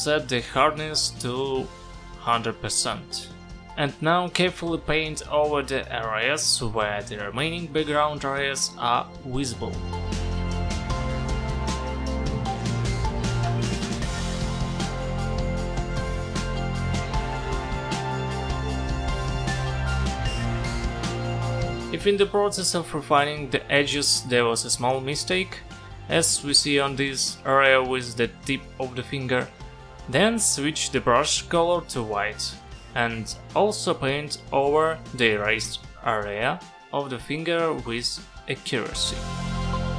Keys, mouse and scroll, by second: 2.5 click, 4.6 click, 11.6 click, 13.4 space, 13.5 click, 13.7 click, 15.7 space, 15.8 click, 16.4 [, 16.6 click, 19.7 click, 21.4 click, 23.7-24.6 typing, 25.2 click, 29.0 [, 29.2 [, 29.4 [, 30.3 click.